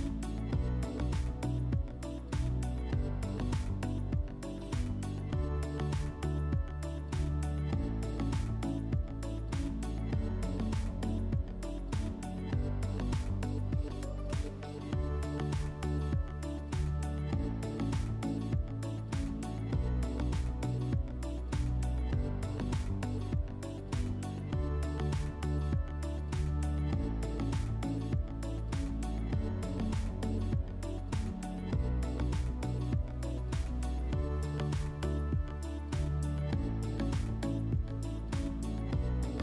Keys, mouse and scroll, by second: 4.7 middle click, 5.2 middle click, 5.8 click, 6.6 click, 6.7 click, 7.4-9.5 typing, 9.7 click, 11.5-12.7 typing, 13.7 click, 14.3 click, 14.4 click, 14.5 click, 14.6 click, 15.3-16.2 typing, 16.6 Return, 17.8 click, 18.6 click, 18.7 click, 19.4-21.9 typing, 19.7 Tab, 21.8 click, 22.4 click, 22.5 click, 23.2-24.7 typing, 23.5 Tab, 27.2 click, 32.9 click, 34.8 click, 36.3 click, 38.1 click, 38.9 click.